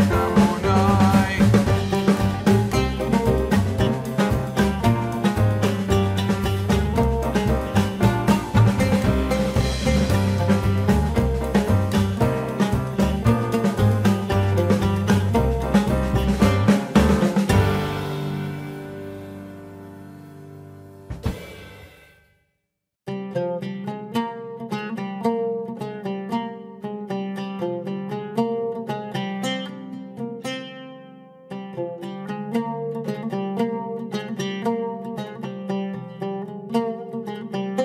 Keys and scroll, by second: 28.8 ctrl+shift+n, 29.2 Return.